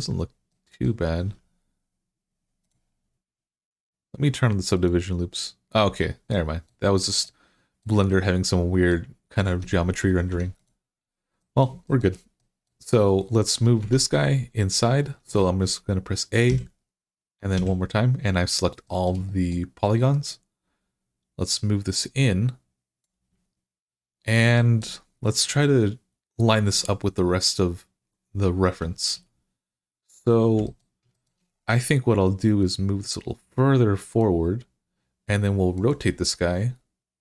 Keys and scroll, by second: 1.1 Tab, 9.3 Tab, 10.1 Tab, 13.6 Tab, 16.2 Tab, 16.3 a, 17.4 a.